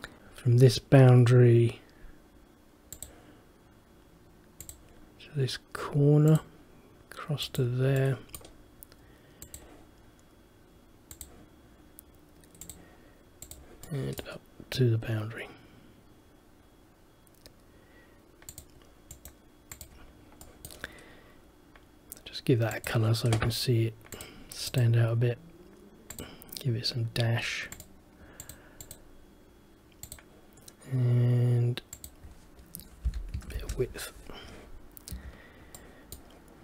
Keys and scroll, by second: 0.2 ctrl+z, 33.7 Return, 35.2 Escape.